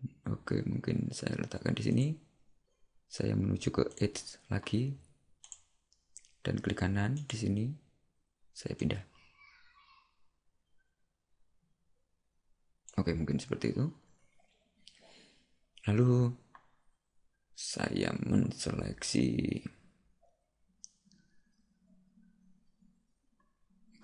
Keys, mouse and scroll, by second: 4.0 click, 7.3 right click, 8.8 click.